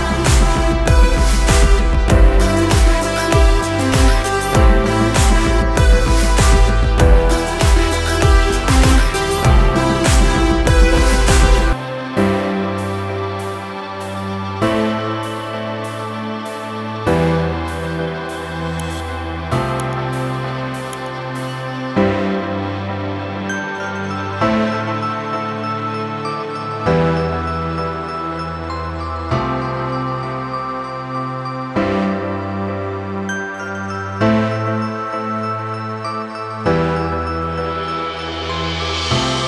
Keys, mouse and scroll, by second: 0.8 click, 1.3 F4, 2.3 F9, 4.6 ctrl+o, 5.8 scroll up 1, 7.1 click, 8.6 click, 9.2 F4, 10.2 F9, 11.2 click, 13.3-13.9 scroll down 1, 14.2 click, 16.1 click, 16.7 F4, 17.5 F9, 18.6 click, 19.4 ctrl+o, 19.9 scroll down 1, 20.9 click, 22.8 click, 23.3 F4, 24.3 F9, 25.9 click, 27.2 ctrl+o, 27.5 scroll down 1, 28.4 click, 29.3 click, 30.5 click, 31.2 F4, 32.2 F9, 33.1 click, 33.9 ctrl+o, 35.6 click, 36.2 click.